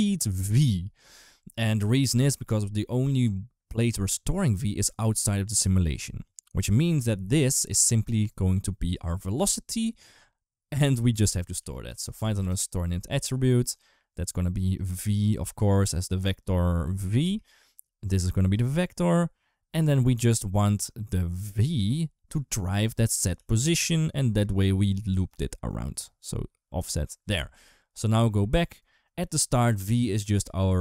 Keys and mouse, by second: 6.7 click, 6.9 click, 10.7 ctrl+right click, 11.4 shift+a, 13.3 g, 14.6 click, 15.6 click, 16.5 click, 17.8 click, 18.8 click, 21.2 click, 21.4 shift+d, 22.7 click, 23.2 g, 24.0 click, 24.2 click, 25.1 click, 26.0 click, 27.6 ctrl+s, 27.9 click.